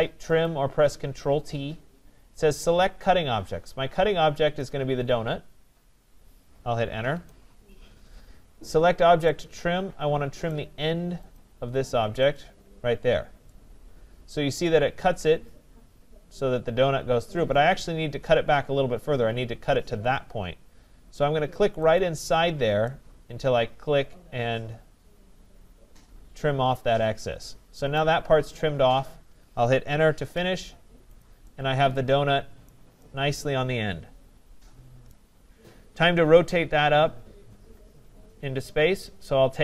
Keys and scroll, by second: 7.1 Return, 29.8 Return.